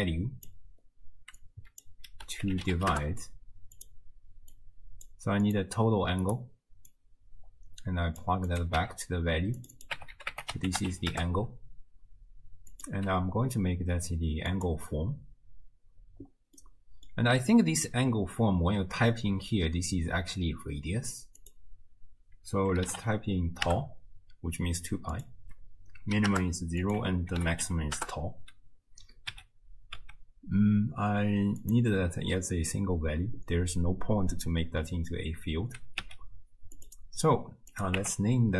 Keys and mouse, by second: 1.4-3.9 drag, 4.5-5.1 drag, 5.4 click, 6.4-6.9 middle drag, 6.9-8.3 drag, 8.3 middle click, 8.5 click, 8.6-9.7 middle drag, 9.7-11.2 drag, 11.2-12.7 middle drag, 12.7-14.8 drag, 14.8-16.7 middle drag, 16.7 click, 17.1-21.4 middle drag, 21.4-23.7 drag, 23.7-25.2 middle drag, 25.2-26.3 drag, 26.3 middle click, 26.8-28.1 drag, 28.1-30.0 middle drag, 29.3 n, 30.0 n, 31.6 click, 36.0 n, 36.8 click, 37.8 click.